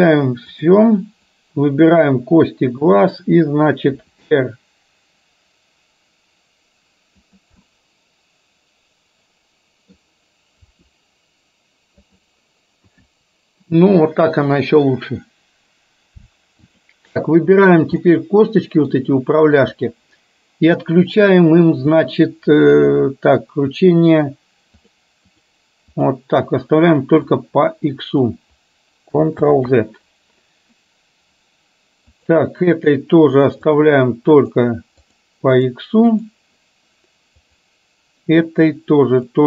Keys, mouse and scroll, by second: 0.5 click, 1.4 click, 4.0 r, 7.7-10.0 middle drag, 10.7 r, 12.9 KP_1, 16.7 click, 18.1 middle click, 19.6 click, 22.0 click, 25.0 click, 27.6 click, 29.6 ctrl+z, 32.1 click, 35.1 click, 35.7 click, 36.2 click, 37.6 click.